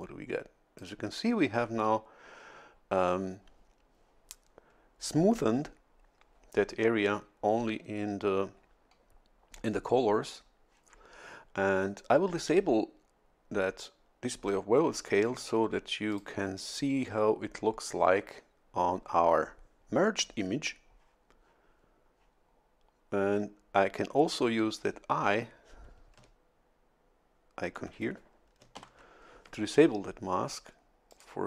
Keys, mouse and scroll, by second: 16.1 click, 28.8 shift+F11, 31.1 click.